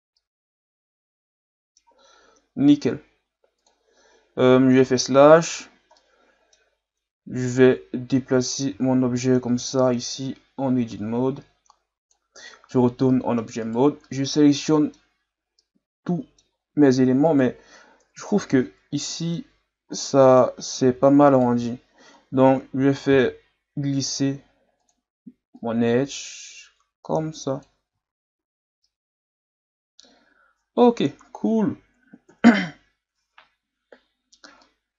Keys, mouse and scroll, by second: 0.2-2.0 middle drag, 2.0-2.9 scroll down 1, 2.9-3.6 scroll down 1, 3.6-4.8 drag, 4.8 KP_Divide, 5.9-7.5 middle drag, 7.5 right click, 8.2 Tab, 8.7 a, 9.0 a, 9.7-12.4 drag, 12.4 Tab, 12.7-13.6 middle drag, 13.6 right click, 14.0-15.1 middle drag, 15.1-15.6 scroll up 1, 15.6-17.3 middle drag, 17.3 right click, 18.0 KP_Divide, 18.5 Tab, 19.0 middle click, 19.5-20.0 scroll up 1, 20.0-21.3 middle drag, 21.3 alt+right click, 23.1 ctrl+e, 27.9 Tab, 28.4 a, 28.8-31.9 middle drag, 32.3 KP_Divide, 34.3-34.6 scroll down 1, 34.6-34.9 middle drag.